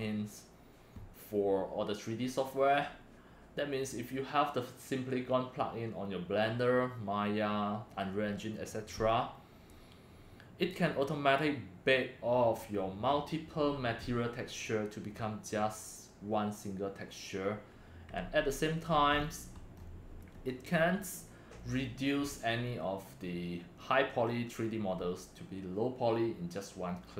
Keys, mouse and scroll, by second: 18.2 Right, 19.1-19.8 scroll up 5, 20.3 scroll down 2.